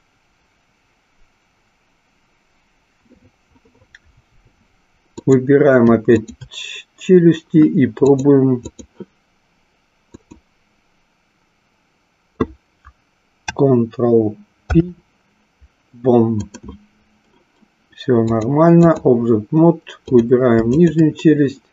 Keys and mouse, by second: 5.1 click, 6.2 shift+click, 8.1-8.8 drag, 10.1 click, 14.7 ctrl+p, 18.2 click, 20.8 shift+click.